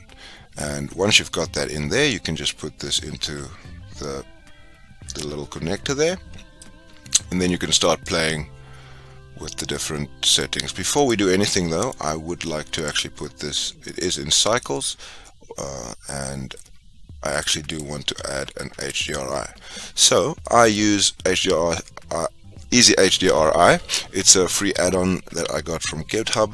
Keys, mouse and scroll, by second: 2.8 click, 6.2 scroll up 5, 6.7-11.0 middle drag, 11.0 click, 13.0 click.